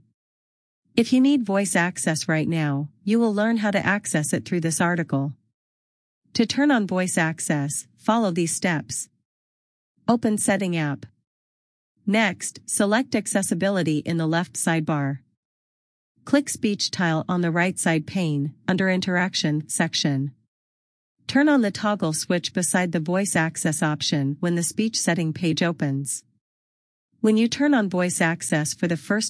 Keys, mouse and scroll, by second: 7.2-8.4 scroll down 1, 8.4 click, 10.7 click, 15.3 click, 24.1 click, 26.2 click.